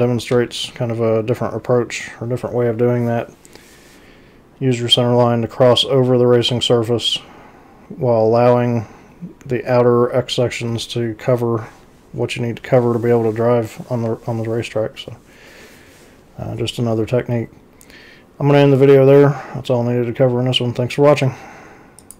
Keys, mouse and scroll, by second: 0.3 x, 22.0 click.